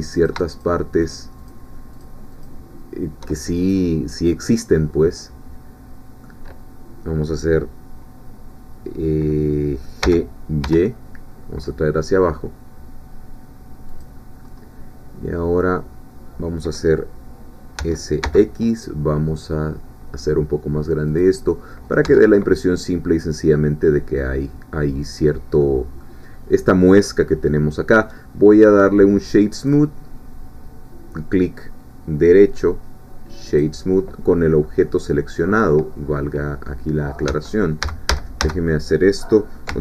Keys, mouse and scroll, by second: 0.2 shift+click, 1.1 shift+click, 2.0 shift+click, 4.2-4.8 scroll down 2, 4.8-7.1 middle drag, 10.0 g, 10.6 y, 13.9 click, 14.4-14.8 scroll up 2, 17.8 s, 18.2 x, 21.1 click, 21.4 scroll down 1, 21.7 middle click, 22.0 Tab, 22.4-24.4 middle drag, 25.6 middle click, 29.6 right click, 33.5-34.8 drag, 34.8-37.3 middle drag, 37.3 Tab, 37.8 a.